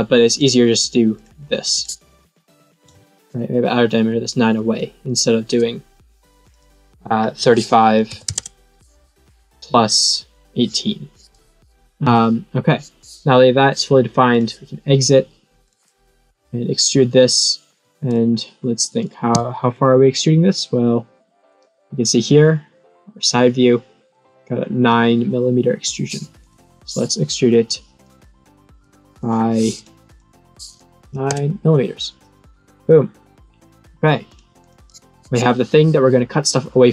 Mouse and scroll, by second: 0.3 click, 1.1 click, 1.7 click, 6.4 click, 14.3 click, 15.6 click, 16.3 click, 19.7 click, 26.3 click, 28.0 click, 28.6 click, 29.0 click, 29.2 click, 29.5 click, 30.0 click, 32.6 middle click, 34.2 click, 34.6 click.